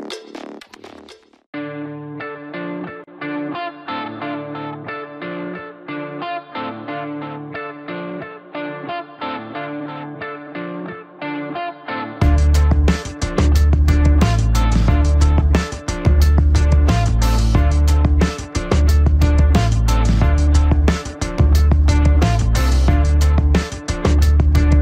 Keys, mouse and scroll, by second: 1.4 click, 4.4 alt+click, 5.3-5.6 scroll up 1, 7.8 click, 8.8 scroll up 1, 10.6-11.4 typing, 12.4 click, 16.9 scroll up 1, 18.1 ctrl+=, 18.5-19.0 scroll up 1, 19.0 click, 20.4 click, 23.4 ctrl+z, 24.2-24.8 typing.